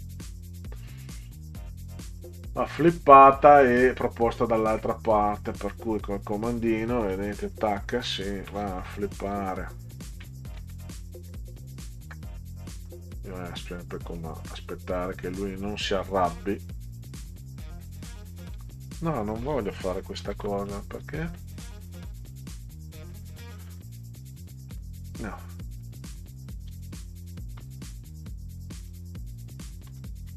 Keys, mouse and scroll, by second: 1.3 click, 2.3 scroll up 2, 2.9 click, 5.1 click, 7.5 shift+Left, 9.3 Left, 10.7 alt+Left, 10.9 alt+Left, 11.1 alt+Left, 12.9 click, 14.2 middle click, 16.7 alt+Left, 20.2 ctrl+z, 23.7 click, 24.5 click, 25.8 click, 27.6 ctrl+z, 28.8 ctrl+z, 29.9 ctrl+z.